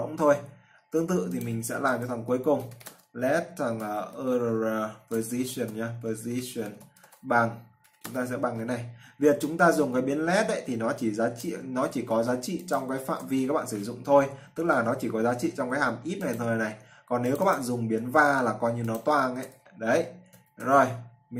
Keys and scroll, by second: 12.5 ctrl+x, 13.4 ctrl+v, 18.6 ctrl+c, 19.6 ctrl+v.